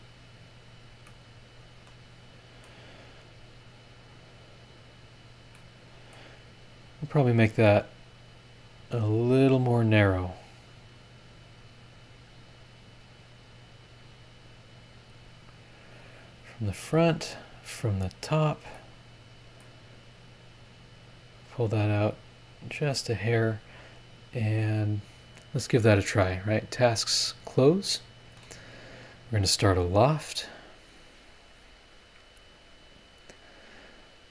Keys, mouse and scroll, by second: 0.4-1.0 scroll up 4, 1.1-2.8 middle drag, 1.2-2.8 drag, 2.8-3.4 scroll down 4, 4.3-5.0 scroll up 3, 5.2 scroll down 1, 5.5 middle click, 5.7 click, 6.4 scroll up 1, 8.1 click, 9.5 click, 10.8 click, 11.8-13.3 drag, 14.6 click, 16.1 click, 18.1 click, 18.7 middle click, 18.8 click, 18.8 right click, 20.7 click, 21.3-22.8 drag, 23.5-24.0 scroll up 1, 26.4 click, 26.8 click, 27.8 middle click, 31.3 click.